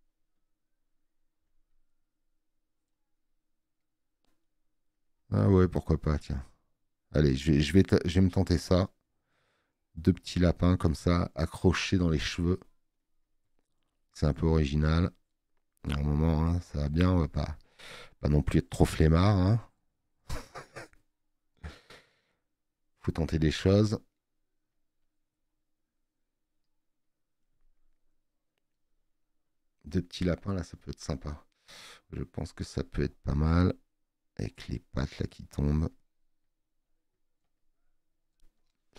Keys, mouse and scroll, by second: 1.1 scroll up 1.